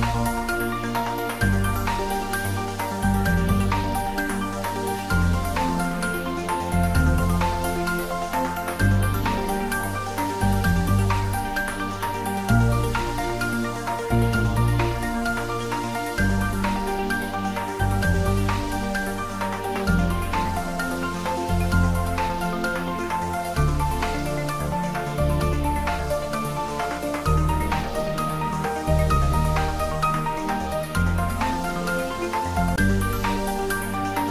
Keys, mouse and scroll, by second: 1.1-2.6 typing, 2.9 click, 4.0 ctrl+z, 5.5 r, 6.8-9.2 typing, 8.2 click, 10.4 click, 10.7 ctrl+z, 11.6-14.1 typing, 14.2 click, 15.3 g, 18.1 y, 20.3 click, 20.7 scroll down 1, 21.1-23.0 middle drag, 23.0 ctrl+z, 23.4-24.1 scroll up 1, 24.5 ctrl+z, 25.6 click, 26.2 scroll up 1, 27.2 ctrl+z, 28.2 scroll up 1, 29.3-30.2 typing, 31.4 click, 32.2 shift+d, 33.3 r.